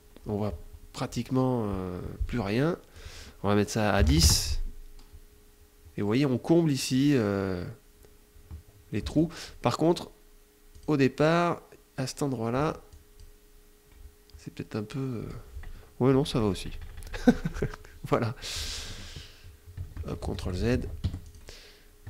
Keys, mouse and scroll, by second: 2.3 click, 3.4 KP_0, 3.6 KP_Enter, 8.4 z, 8.5 click, 10.1 click, 11.9 z, 12.3 click, 15.4 KP_Subtract, 17.5 middle click, 19.3 ctrl+z, 20.4 ctrl+F1, 20.6 ctrl+click, 21.5 ctrl+z.